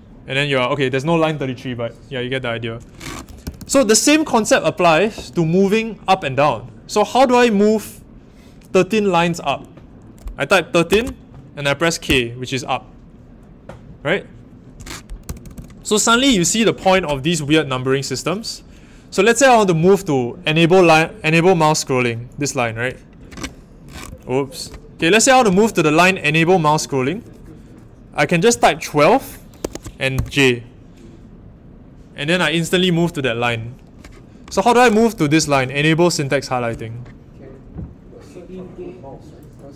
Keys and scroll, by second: 3.2-3.7 typing, 10.4-11.3 typing, 15.2 typing, 23.9-24.5 typing, 29.2-30.1 typing.